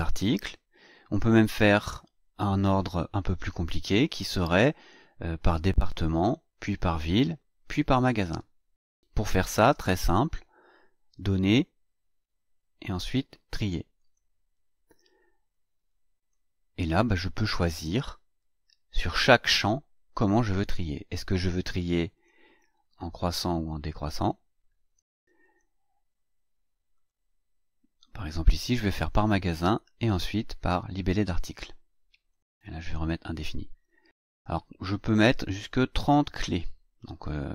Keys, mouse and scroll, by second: 11.2 click, 13.9 click, 15.5-16.4 drag, 17.8 click, 22.1 click, 23.9 click, 25.4 click, 26.9 click, 32.3 click, 32.9 click.